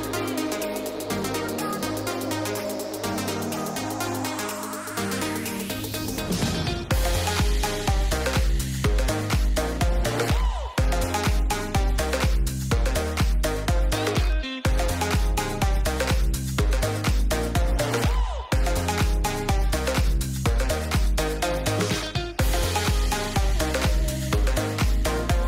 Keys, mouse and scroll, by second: 1.5 g, 2.1 a, 2.4 g, 3.4 middle click, 4.4 shift+middle click, 4.8 shift+middle click, 4.9 middle click, 5.5 middle click, 6.3 middle click, 7.4 shift+middle click, 8.2 shift+middle click, 8.8 a, 9.1 g, 9.9 shift+middle click, 10.3 middle click, 11.7 click, 12.1 click, 13.0 a, 13.3 g, 14.4 shift+middle click, 15.7 ctrl+click, 17.7 click, 18.6 middle click, 21.3 alt+click, 24.2 middle click, 25.2 g.